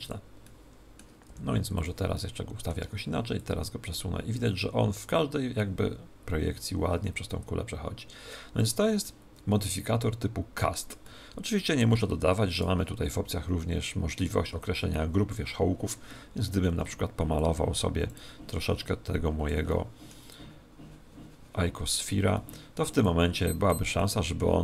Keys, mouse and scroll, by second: 0.0-5.3 drag, 0.4-1.7 middle drag, 1.2 r, 2.1 r, 2.3-4.0 middle drag, 9.0-10.8 middle drag, 11.0-12.6 middle drag, 12.5 right click, 16.4 ctrl+Tab, 17.3-19.9 drag, 19.6-21.4 middle drag, 20.2 click, 22.3-24.6 middle drag, 23.0-24.6 drag.